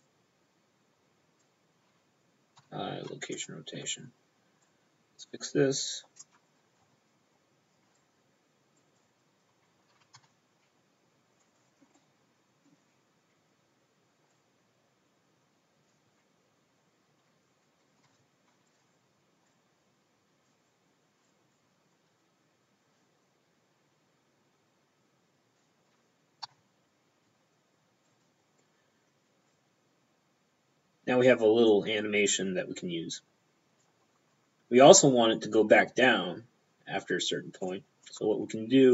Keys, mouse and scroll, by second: 0.1 click, 1.5 p, 2.7 i, 3.4 click, 4.7 click, 6.3 p, 8.0 click, 8.8 right click, 9.0 right click, 10.0 g, 10.2 y, 11.5 click, 12.0 middle click, 14.4 click, 16.0 p, 18.1 i, 18.2 p, 18.7 click, 19.6 click, 21.3 click, 26.5 i, 26.6 p, 28.1 click, 29.6 click, 37.8 click, 38.1 p.